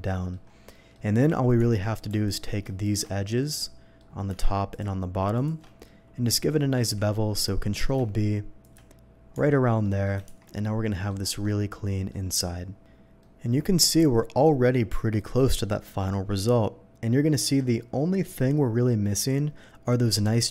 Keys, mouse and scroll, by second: 0.5 scroll up 1, 0.5 scroll down 1, 0.7 middle click, 1.6 Tab, 2.2 alt+Tab, 2.2 alt+click, 2.8 alt+shift+click, 3.4 alt+shift+middle click, 4.7 alt+shift+click, 5.3 alt+shift+click, 5.8-6.5 alt+shift+middle drag, 6.8 ctrl+b, 7.3-7.6 scroll up 2, 8.6 shift+click, 9.3 Tab, 9.8 middle click, 10.2 shift+2, 10.5-11.1 middle drag, 11.2 scroll down 1, 11.4-12.1 middle drag, 13.2-14.9 middle drag, 15.7-20.5 middle drag.